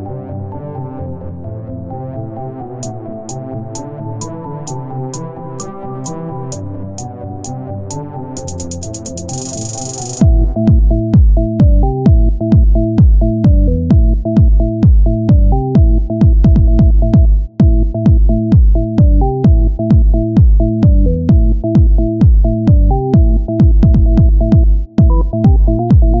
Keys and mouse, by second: 2.6 right click, 3.1 Tab, 4.9-9.3 drag, 7.0 Tab, 10.1 click, 10.3 Tab, 11.2-13.6 drag, 15.7 Tab, 18.7 Tab, 22.8 click, 22.9-26.2 middle drag.